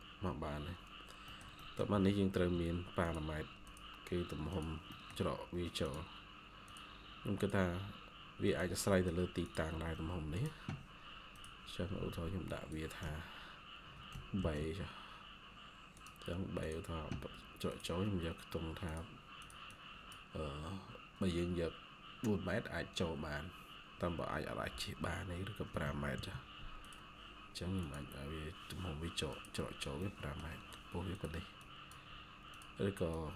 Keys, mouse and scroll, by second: 0.0-0.6 scroll up 1, 1.2 middle click, 5.0-5.9 scroll up 1, 8.8 middle click, 9.6 Escape, 9.8 Escape, 14.3 b, 19.6 double click, 25.7-26.1 typing, 29.6 scroll down 1, 29.9 middle click, 31.5 double click.